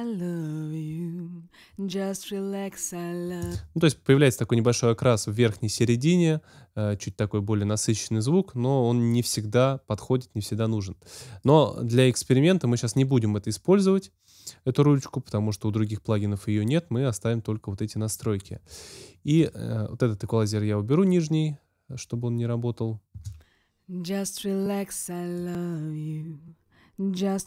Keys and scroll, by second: 3.3 space, 23.1 space.